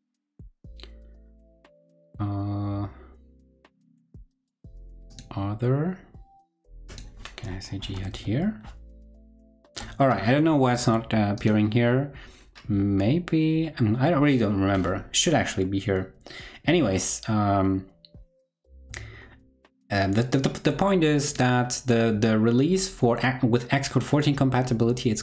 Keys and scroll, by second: 18.7 super+w.